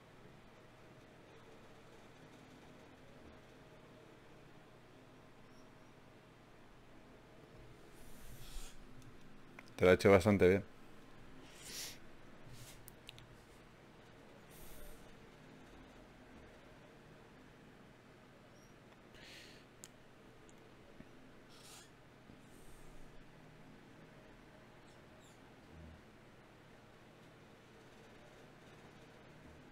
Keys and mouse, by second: 1.9 a, 3.1 shift+q, 6.0 click, 6.5-7.8 right drag, 7.8-10.2 middle drag, 10.8-11.8 middle drag, 12.0-14.0 middle drag, 17.4 ctrl+Tab, 17.5 click, 18.4 g, 20.4 click, 23.0-24.2 drag, 24.2 g, 24.6-26.8 drag, 26.8 g, 28.0 g, 29.6-29.7 drag.